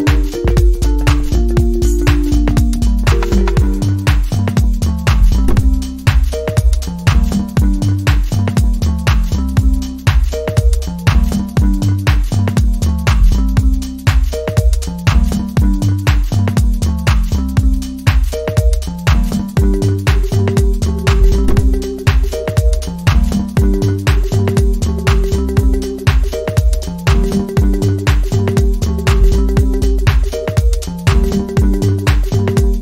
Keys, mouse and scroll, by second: 0.2 ctrl+j, 1.8-2.7 alt+scroll up 7, 2.8-4.2 space, 5.5-6.0 alt+scroll up 3, 32.0 right click.